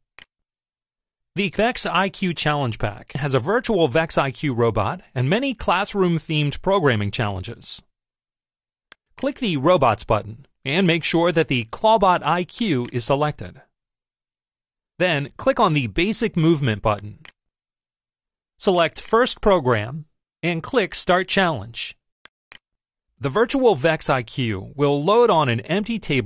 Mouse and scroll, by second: 0.0 click, 9.0 click, 12.7 click, 17.1 click, 18.9 click, 22.3 click.